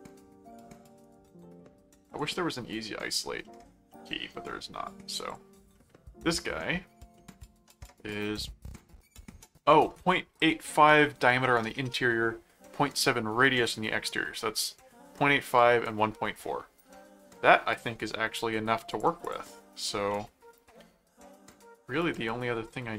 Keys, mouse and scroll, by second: 1.0 right click, 2.1 click, 3.4 middle click, 5.1 click, 5.7 middle click, 7.2 middle click, 18.9 click, 20.1 middle click, 22.1 middle click.